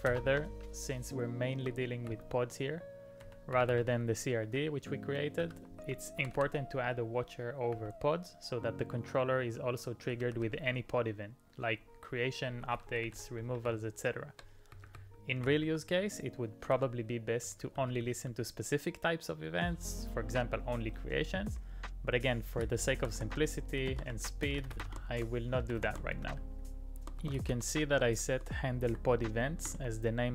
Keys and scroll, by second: 0.1 alt+i, 1.3 typing, 3.2-7.7 typing, 10.1-10.6 typing, 12.8-14.5 typing, 15.7 p, 16.7-18.3 typing, 22.2 typing, 23.6-28.9 typing.